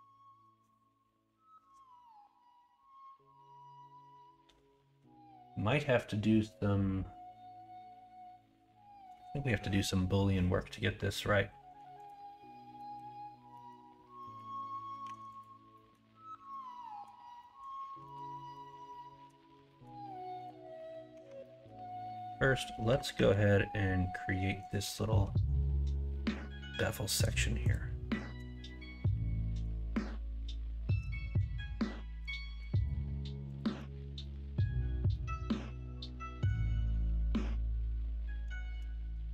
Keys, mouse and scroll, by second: 12.7 middle click, 13.5 middle click, 14.1 middle click, 15.0 Tab, 15.7 middle drag, 16.5-17.0 middle drag, 17.4 middle click, 18.0 middle drag, 18.5-19.3 middle drag, 19.6 middle click, 20.7 middle click, 21.1 Tab, 21.4 middle click, 22.8 KP_1, 23.1 KP_3, 34.2 middle click, 38.6 shift+d.